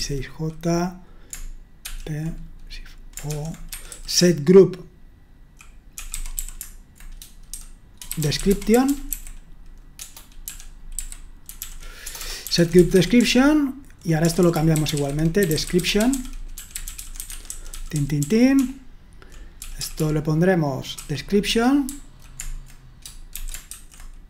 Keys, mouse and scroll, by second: 0.0-0.4 typing, 1.8 typing, 3.3-6.3 typing, 7.5-19.6 typing, 20.9-22.3 typing, 21.5 Escape, 23.4-23.7 typing.